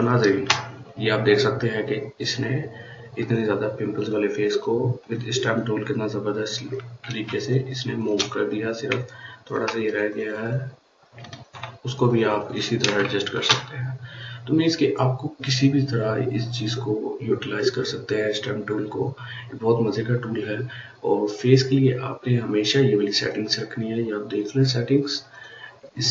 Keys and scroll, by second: 12.8 ctrl+space.